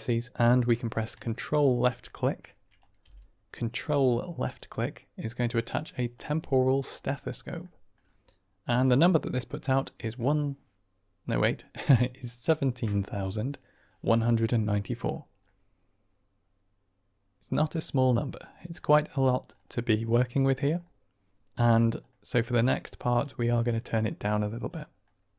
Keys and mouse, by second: 0.5 click, 2.4 click, 3.0 g, 6.0 click, 7.6 middle click, 8.9-13.9 drag, 15.4-17.6 middle drag, 18.7 middle click, 19.8 middle click, 20.3 click, 22.0 click, 24.8 drag.